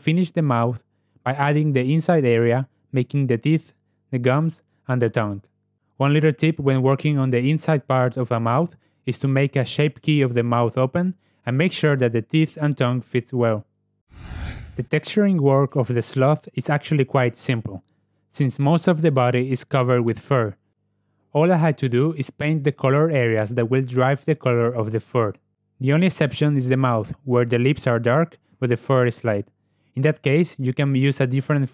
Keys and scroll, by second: 2.2 Tab, 2.9 /, 8.6 3, 9.1 g, 24.7 z.